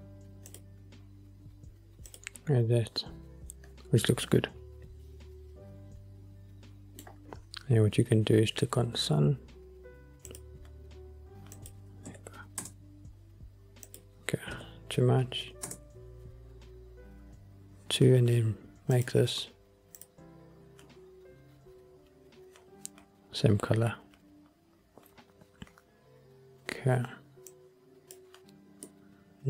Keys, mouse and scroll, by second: 0.6 click, 2.2 click, 5.0-7.3 middle drag, 5.0 scroll down 1, 8.8-10.4 scroll down 4, 10.4 click, 11.7-12.8 drag, 14.0-15.8 drag, 19.0 click, 27.6 click, 29.0-29.4 middle drag.